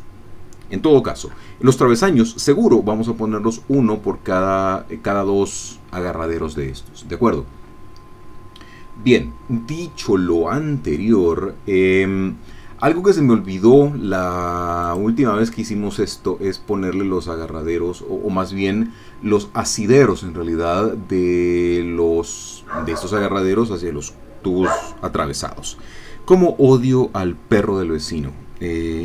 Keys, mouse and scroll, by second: 15.0 click.